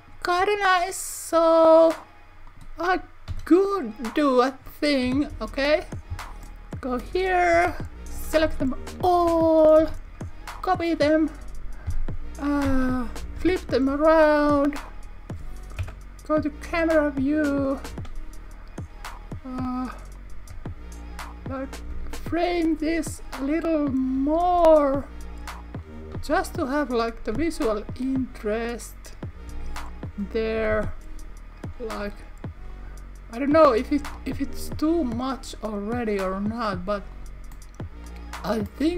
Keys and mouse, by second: 1.8 click, 2.5 click, 3.3 Tab, 3.8 click, 5.1 KP_1, 5.3 KP_3, 7.6 Tab, 8.5 a, 9.9 shift+d, 11.0 click, 11.9 s, 12.7 z, 13.3 -, 13.4 1, 13.8 Return, 15.8 KP_0, 18.0 r, 20.2 click, 20.6 s, 21.6 click, 21.9 g, 22.6 click, 24.0 click, 25.9 click, 26.2 s, 26.9 click, 27.2 r, 27.3 r, 28.6 click, 30.1 click, 30.8 z, 31.6 click, 32.1 g, 32.7 click, 34.3 s, 35.2 click, 37.1 click, 37.5-38.9 middle drag.